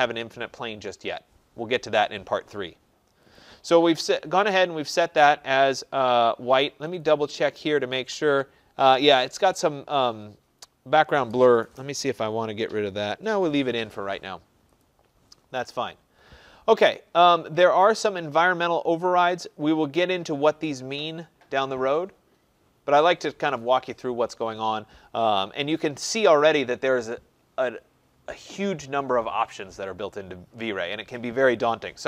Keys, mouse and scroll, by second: 3.3 click, 7.0 click, 14.8 click, 19.1 click, 25.8-30.9 drag.